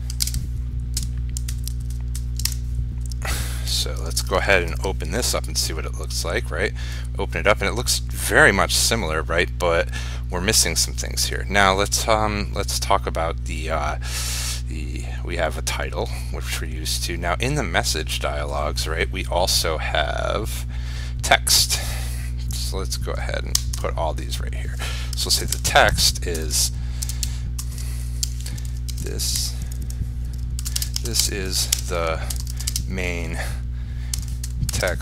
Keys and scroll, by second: 0.4 ctrl+space, 4.3 ctrl+s, 5.0 ctrl+r.